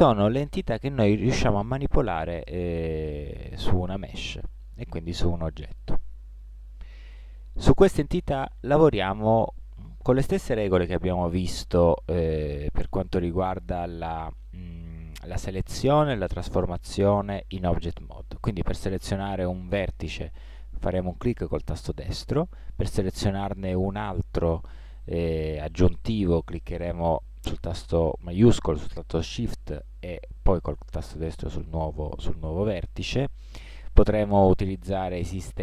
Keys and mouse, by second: 0.0-2.0 middle drag, 16.9-20.0 middle drag, 29.9 middle click, 33.0-34.7 middle drag.